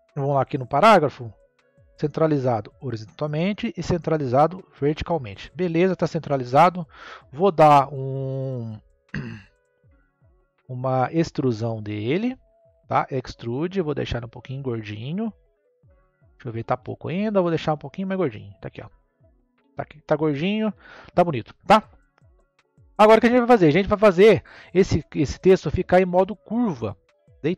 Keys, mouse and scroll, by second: 0.6-1.0 drag, 1.0 scroll down 3, 1.7-6.5 drag, 7.1 scroll up 1, 9.1 click, 10.2 click, 11.8-12.2 scroll up 1, 13.0-15.3 drag, 15.3 scroll up 1, 15.5-17.5 middle drag, 17.5-20.5 drag, 23.7-27.5 middle drag.